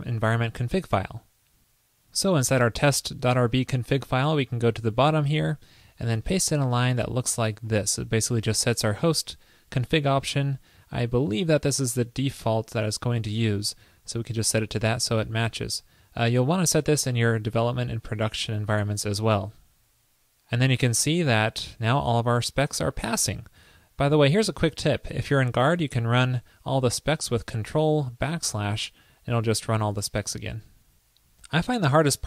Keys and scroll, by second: 6.4 super+v, 19.4 super+s, 27.9 ctrl+\.